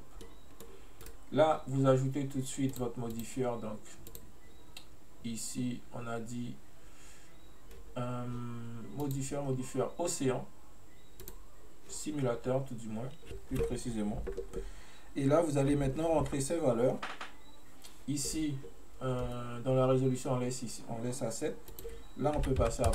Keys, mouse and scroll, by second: 0.3-1.1 middle drag, 1.1-2.8 right drag, 2.8 click, 3.2 click, 4.1-7.2 drag, 9.1-12.2 drag, 21.9-22.9 drag.